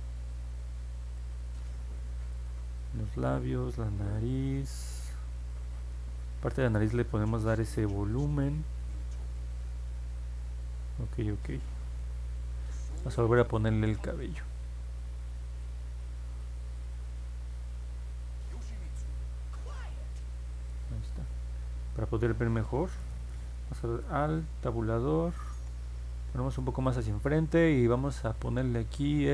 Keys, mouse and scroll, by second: 24.3-25.6 alt+middle drag.